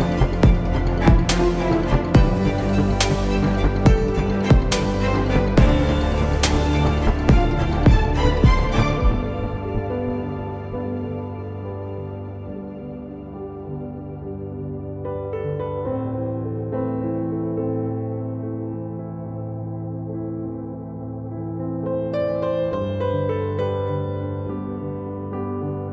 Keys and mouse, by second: 0.4 click, 0.4 z, 0.8 click, 1.2 Tab, 13.1 z, 14.4 z, 19.3 z, 21.3 Tab, 21.6 a, 21.8 a, 23.4 s.